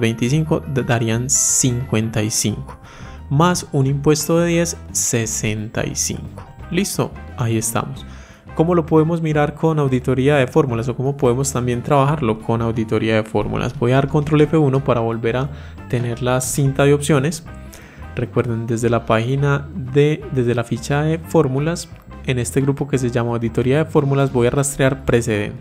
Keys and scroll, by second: 14.1 ctrl+F1.